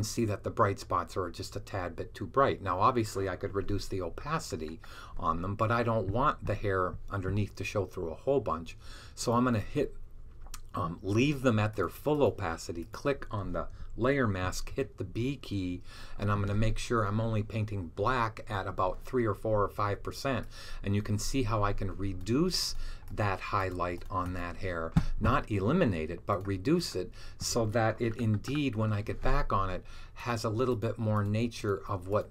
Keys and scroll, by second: 14.5 b.